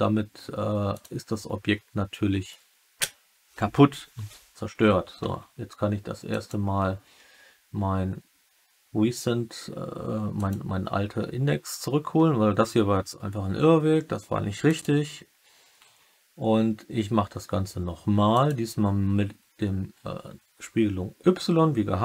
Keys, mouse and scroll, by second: 6.3-14.9 drag, 18.2 click.